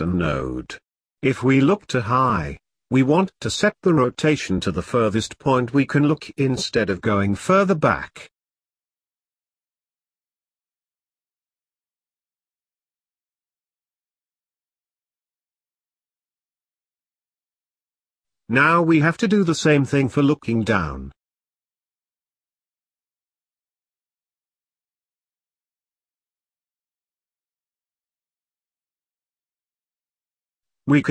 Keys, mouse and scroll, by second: 4.5-7.5 drag, 8.2-9.5 drag, 10.7 click, 11.9-12.6 scroll down 4, 12.6 middle click, 13.0-13.5 scroll up 2, 14.1 click, 16.8 scroll up 3, 17.0-18.3 middle drag, 18.3 click, 25.4 click, 29.6 click.